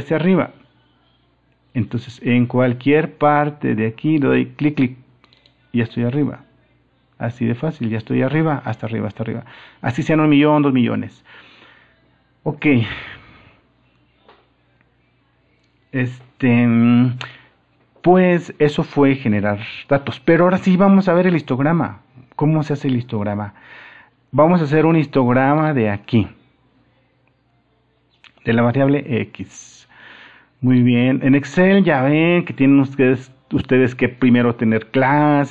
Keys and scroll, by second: 9.0 super+-.